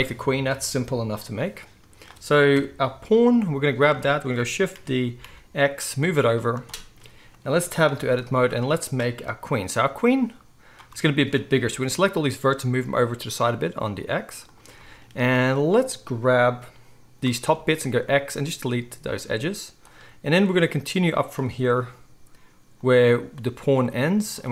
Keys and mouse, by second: 0.0-1.8 right drag, 1.8-6.9 drag, 2.5 KP_1, 4.7 shift+d, 6.9-10.2 right drag, 7.9 Tab, 8.2 z, 10.2-14.5 middle drag, 11.6 g, 14.5-15.3 shift+right drag, 17.9 x, 21.7 g, 22.9-24.3 right drag, 24.3-24.5 middle drag.